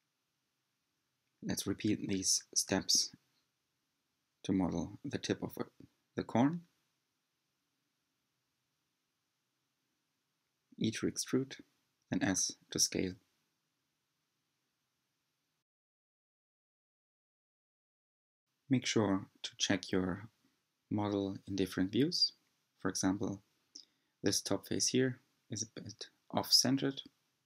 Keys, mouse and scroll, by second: 0.8 e, 2.7 s, 6.9-7.5 scroll up 3, 7.5-8.9 shift+middle drag, 8.9 g, 13.5 s, 17.9 e, 20.1 s, 25.2 click, 26.4 scroll up 4.